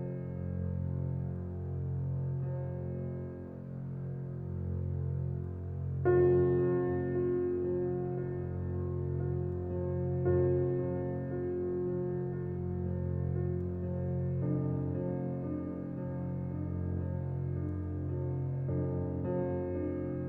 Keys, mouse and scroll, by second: 0.8 click, 1.5 right click, 2.2 click, 11.4 right click, 15.7 click, 16.2 right click, 16.9 click.